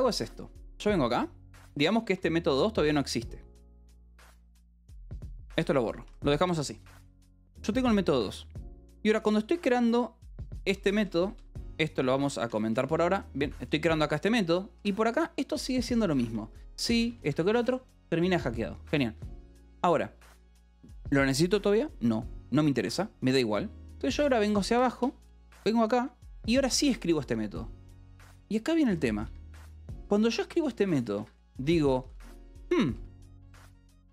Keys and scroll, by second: 1.5 j, 2.8 Escape, 3.7 j, 4.2 j, 5.4 d, 5.5 Escape, 5.7 k, 6.6 ctrl+s, 6.7-8.8 typing, 10.5 j, 11.4 g, 11.8 c, 12.3 Escape, 12.5 k, 13.6-16.2 typing, 17.2 Escape, 18.1 ctrl+s, 24.7 j, 26.5 j, 28.4-34.1 typing, 31.1 Escape.